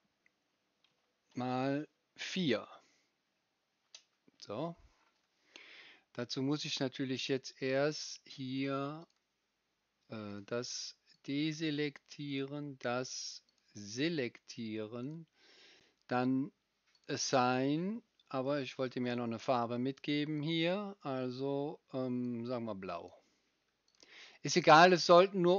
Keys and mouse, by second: 7.8-9.0 right drag, 9.0 middle click, 9.1-10.3 right drag, 10.3 middle click, 10.4 right click, 11.1-12.4 middle drag, 12.4-13.5 right drag, 13.5-15.1 middle drag, 15.1-16.9 right drag, 16.9-20.6 middle drag, 20.6-25.5 right drag.